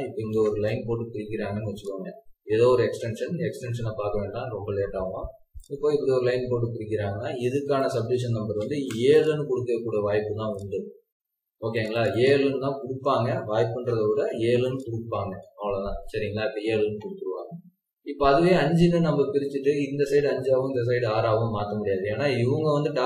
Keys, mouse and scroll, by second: 2.4 scroll up 1, 2.7 scroll down 1, 3.3-4.1 scroll up 1, 4.0-4.7 typing, 5.7 Escape, 5.9 scroll down 2, 7.8-8.3 scroll down 1, 8.3-8.7 typing, 9.6-10.5 scroll up 1, 10.2-11.0 typing, 11.9 double click, 13.6-14.0 typing, 15.1 Escape, 15.5 scroll down 1, 18.0-18.9 scroll up 1.